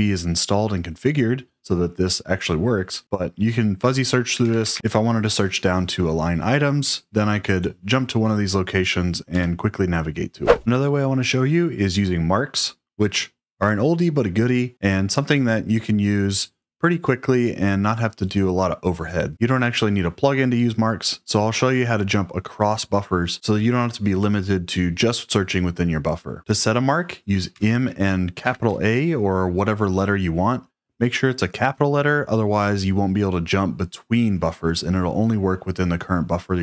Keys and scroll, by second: 4.0-5.2 typing, 9.2 Return, 27.5 m, 28.3 shift+a.